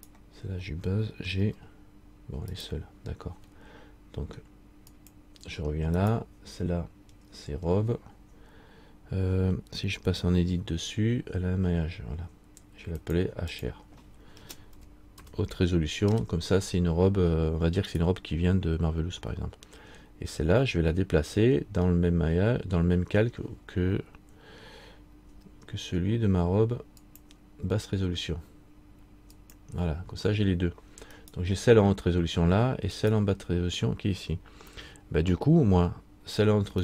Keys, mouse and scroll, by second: 0.1 right click, 1.5 g, 5.0 click, 6.1 right click, 10.8 Tab, 11.9 Tab, 13.2 click, 18.1 right click, 29.5 click, 31.4 right click, 35.1 right click, 35.1 scroll up 1, 36.6-36.8 scroll up 2.